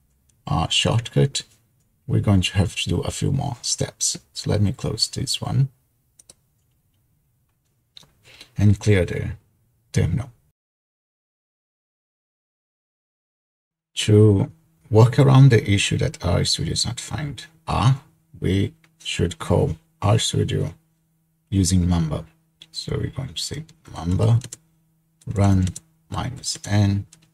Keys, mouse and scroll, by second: 6.3 click, 10.8 ctrl+l, 23.7-27.3 typing.